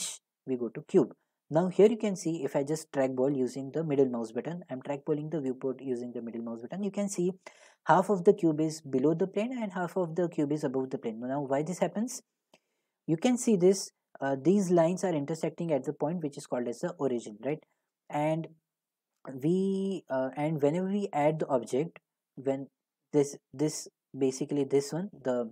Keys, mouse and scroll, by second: 0.8 click, 3.8-5.0 drag, 5.3-6.0 drag, 12.2-18.4 middle drag, 22.4 middle click, 23.8 middle click, 23.9 scroll, 24.5 middle click.